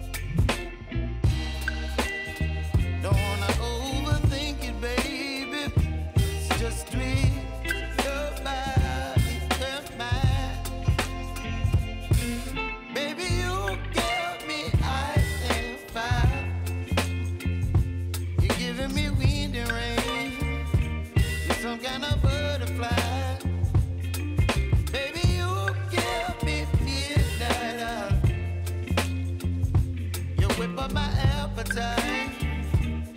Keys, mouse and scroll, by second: 0.0-2.8 drag, 2.8-4.6 typing, 4.5 click, 8.0 click, 8.3 j, 9.5-11.6 drag, 11.7 F9, 12.5-15.6 drag, 15.9 space, 17.6-20.0 drag, 20.0 space, 21.2 click, 25.5 space, 27.3 click, 27.7 space, 29.7 click, 31.3 [, 32.0 click, 32.9 space.